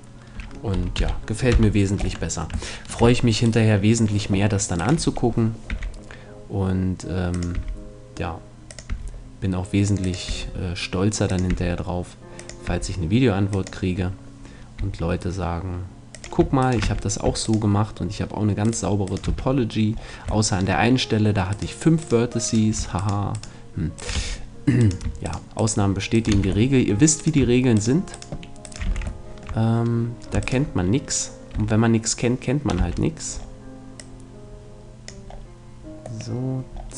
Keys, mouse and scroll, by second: 1.0 t, 1.5 KP_1, 2.0 middle click, 2.0 Tab, 3.4 middle click, 5.7 e, 7.6-15.4 drag, 7.6 e, 8.9 e, 10.3 e, 11.5 e, 12.7 e, 14.8 e, 16.6-18.1 drag, 16.6-20.0 right drag, 16.8 f, 19.3 f, 24.2 f, 26.4 f, 28.6 right click, 28.9 f, 29.2-31.0 middle drag, 31.0-32.4 right drag, 31.6 a, 32.8 c.